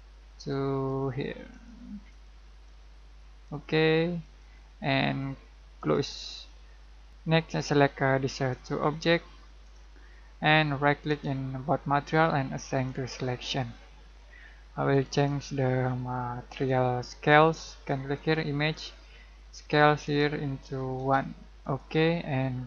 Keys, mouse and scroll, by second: 7.1 Escape, 8.5 click, 11.0 right click, 12.8-18.1 drag, 21.0 1, 21.6 click.